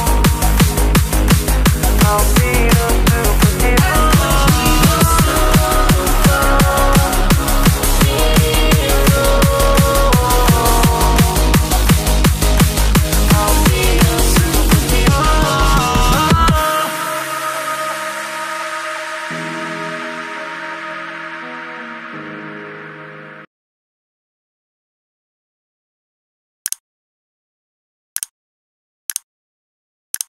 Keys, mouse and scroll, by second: 1.7 ctrl+s, 2.9 click, 6.3 click, 9.9 s, 12.3 click.